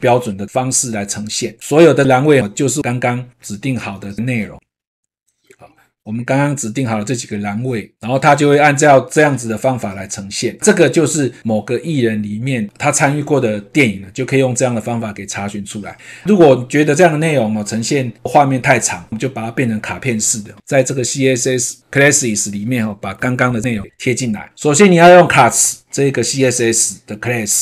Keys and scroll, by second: 23.4 ctrl+v.